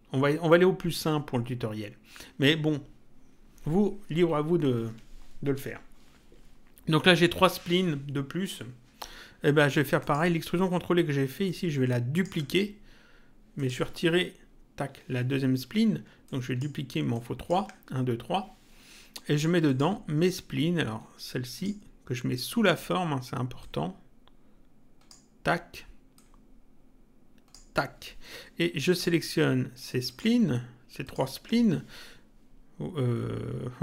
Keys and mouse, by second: 10.0 click, 11.4 ctrl+click, 13.5 click, 14.7 Delete, 16.2 ctrl+click, 19.6 click, 23.6 click, 26.1 click, 28.9 click, 30.1 ctrl+click.